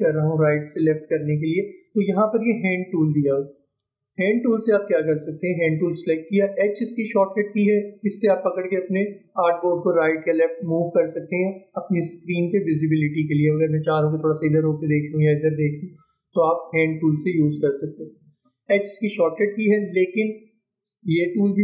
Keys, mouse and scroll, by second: 3.9 click, 8.0-21.6 drag.